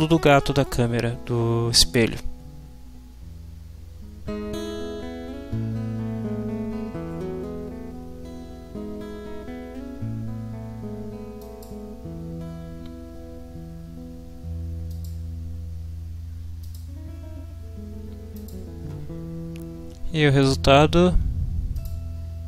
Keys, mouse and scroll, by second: 11.4 click, 14.9 click, 16.6 click, 18.3 click, 21.7 click.